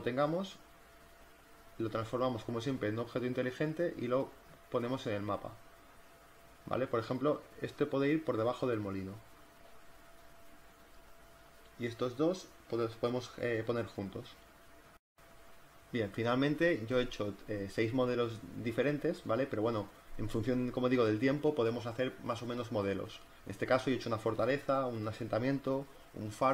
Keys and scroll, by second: 2.6 v, 3.5 ctrl+t, 4.8 Return, 7.3 ctrl+t, 8.0 Return, 8.1 z, 8.7 z, 9.2 v, 10.6 ctrl+t, 11.3 Return, 11.9 ctrl+t, 15.1 z, 21.2 z, 22.3 space.